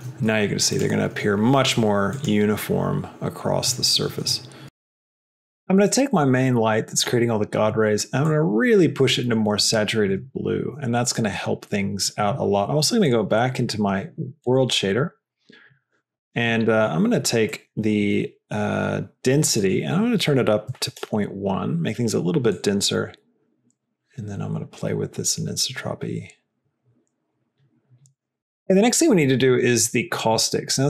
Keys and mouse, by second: 1.4 click, 8.1 click, 10.2 middle click, 12.9-14.4 drag, 14.9-15.8 drag, 16.4 middle click, 17.5 middle click, 19.6-21.9 drag, 22.6-28.4 drag, 30.5-30.8 drag.